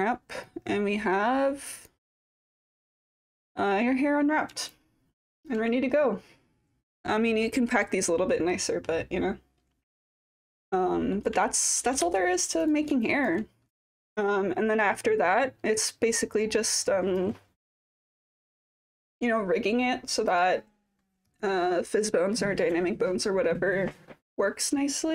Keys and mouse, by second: 1.8 click, 3.2 click, 4.7 alt+click, 10.9 alt+middle click, 11.4 alt+click, 12.0 4, 13.0 alt+drag, 13.7-15.9 typing, 13.9-15.3 alt+drag, 15.4 alt+click, 15.8-17.2 alt+drag, 18.8-20.4 alt+drag.